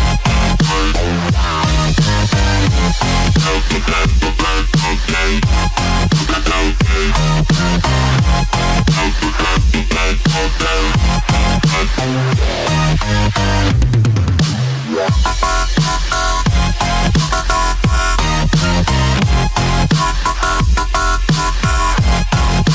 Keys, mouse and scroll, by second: 2.4 ctrl+click, 3.1 right click, 5.0 click, 5.9 click, 8.4 click, 9.0 click, 16.8 click, 20.4 click, 21.1 click.